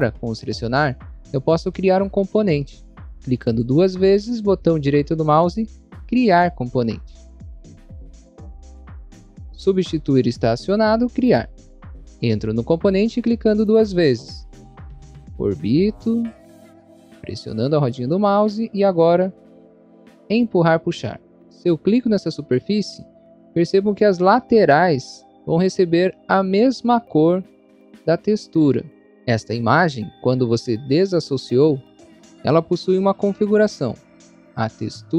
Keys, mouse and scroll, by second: 0.5 scroll down 1, 1.1 scroll down 1, 1.9 scroll up 1, 2.5 scroll up 1, 3.1 click, 3.5 double click, 4.0 right click, 11.1 click, 13.4 click, 13.6 click, 14.1 scroll up 1, 15.0 middle click, 16.0 middle click, 16.7 middle click, 17.7 middle click, 20.5 click, 21.2 scroll up 1, 22.7 click.